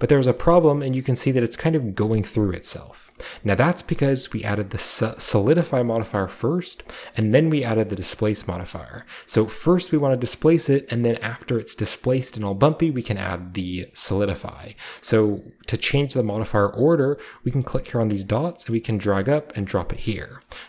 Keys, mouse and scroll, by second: 0.1 shift+middle drag, 0.4-2.2 shift+middle drag, 2.8-3.5 scroll up 2, 3.5-4.3 scroll up 1, 5.0 click, 6.6-7.0 scroll down 2, 7.8 click, 8.1-8.8 scroll up 1, 8.9 scroll down 1, 10.4 click, 13.6-14.2 scroll up 2, 14.2-15.2 scroll down 2, 15.2-16.1 scroll down 1, 16.1-18.2 scroll down 1, 18.2-19.6 drag, 20.2 scroll down 2, 20.4-20.6 shift+middle drag.